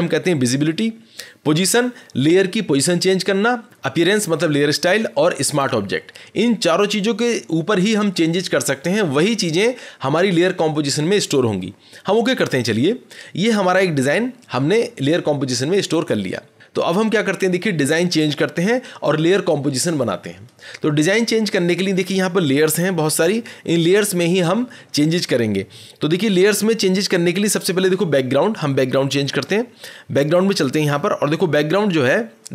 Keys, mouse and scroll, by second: 12.4 click, 26.2-29.4 scroll, 29.4 click, 30.4 click, 30.8-31.6 scroll, 32.0 scroll.